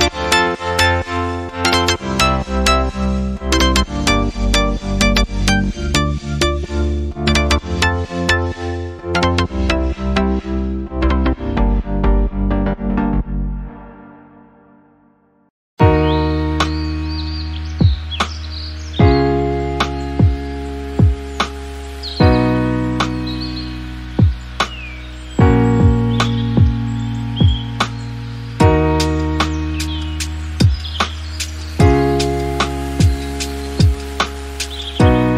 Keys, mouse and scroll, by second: 0.1 click, 1.2 click, 2.5-3.3 scroll down 1, 3.3 scroll down 1, 3.5 shift+c, 3.8-4.4 scroll up 3, 4.0 shift+middle click, 4.4 shift+middle click, 4.8-7.0 right drag, 7.0 drag, 7.7 drag, 8.7 click, 11.1 ctrl+a, 12.5-13.7 drag, 16.0-18.0 shift+middle drag, 18.0 click, 18.5 KP_Decimal, 19.0 shift+middle click, 19.1-19.6 scroll up 4, 19.7-20.0 shift+middle drag, 20.0 drag, 20.3 click, 20.8 KP_1, 22.1 click, 22.5 click, 24.2 click, 25.0-26.0 drag, 26.0 scroll up 2, 26.2 click, 26.5 click, 27.0 Tab, 27.7 alt+z, 27.9 scroll up 1, 28.1 shift+middle click, 28.5-29.1 scroll up 1, 29.1 click, 30.1 click, 31.8 click, 33.7 l, 34.2-34.8 scroll up 1, 34.8 shift+d.